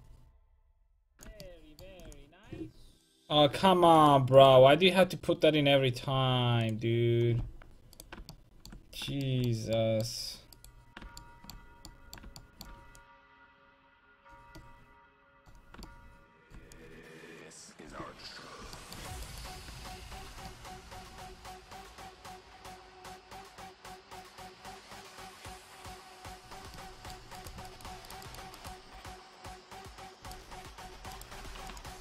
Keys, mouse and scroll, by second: 8.0-10.0 right drag, 10.0 middle click, 10.6-12.4 right drag, 12.4 middle click, 13.0-14.6 drag, 14.6 middle click, 16.7-18.8 drag, 19.3-26.5 right drag, 21.5-26.5 drag, 26.8 middle click, 27.4-32.0 right drag, 29.0 r, 31.6 w.